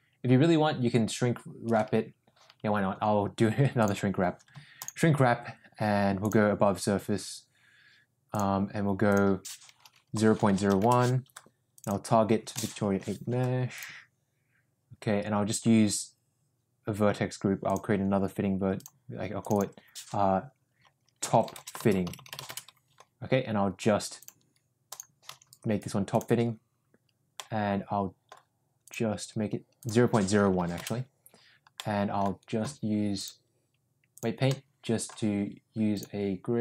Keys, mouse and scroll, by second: 3.7-5.0 drag, 6.1-8.5 drag, 9.1-11.4 drag, 11.7-14.0 drag, 18.9 click, 19.4-22.9 drag, 22.1 t, 24.1 click, 24.9-26.2 drag, 27.3 middle click, 28.8-31.2 drag, 31.7 middle click, 33.1-34.2 drag, 34.4 middle click, 35.9 click.